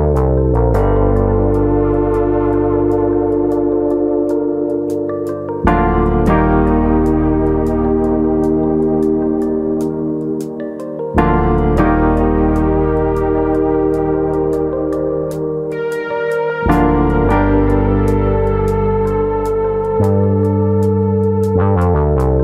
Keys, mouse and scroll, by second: 0.1 middle click, 0.4 click, 0.6 middle click, 1.0 click, 3.5 KP_3, 4.2 shift+middle click, 4.5-6.0 scroll up 1, 6.6 alt+click, 7.1 click, 12.4 alt+click, 13.2 g, 14.4 click, 15.1 alt+click, 15.6 click, 19.3 alt+click, 19.7 s, 20.4 right click, 22.0 ctrl+b.